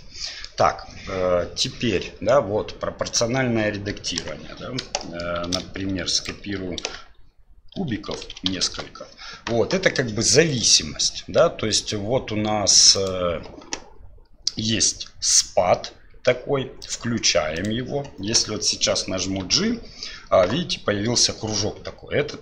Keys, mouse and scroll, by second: 0.0 middle click, 4.2 KP_1, 5.0 middle drag, 5.4 shift+d, 7.8 shift+r, 7.9-8.6 shift+r, 10.5 right click, 13.0-16.9 drag, 17.5 click, 19.4 g.